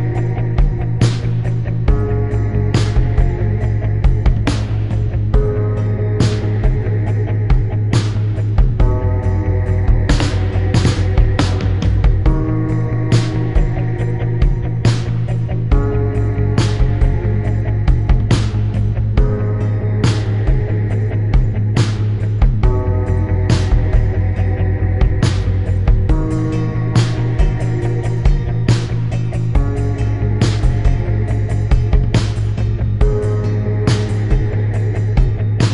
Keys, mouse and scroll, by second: 0.9 click, 1.7 click, 3.0 click, 3.6 click, 4.0 click, 5.2 click, 5.8 click, 7.4 click, 7.7 click, 8.3 shift+click, 8.7 shift+click, 9.4 click, 9.8 click, 10.5 click, 11.9 click, 14.1 click, 14.6 click, 15.4 click, 16.5 click, 18.2 click, 19.0 Delete, 20.4 click, 20.9 click, 22.5 click, 23.1 click, 23.6 click, 25.0 click, 26.7 click, 29.0 click, 29.9 click, 32.3 click, 32.8 shift+click, 33.3 click, 33.8 shift+click.